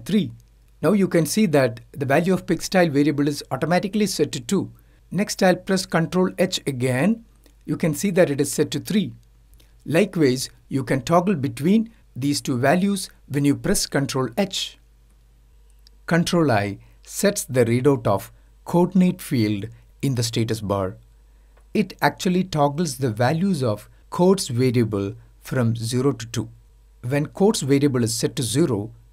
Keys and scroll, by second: 16.6 ctrl+i.